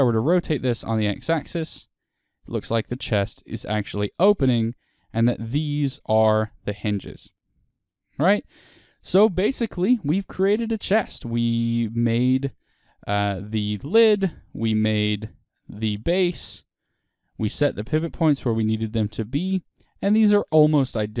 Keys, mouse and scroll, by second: 2.0 click, 2.3-10.6 middle drag, 4.0-4.3 scroll, 4.9-7.3 scroll, 7.9-8.3 scroll, 9.4-9.8 scroll, 11.0-12.3 middle drag, 12.3 r, 13.9 click, 14.2-15.7 middle drag, 15.7 click, 16.2-21.2 shift+middle drag.